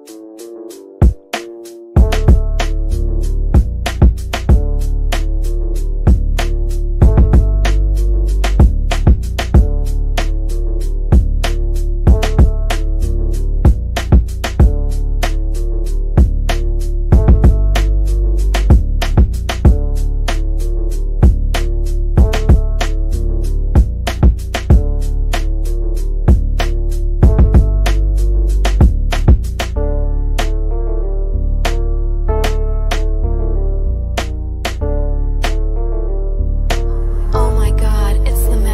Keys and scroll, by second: 10.8 Delete, 24.1 c, 33.9 ctrl+r.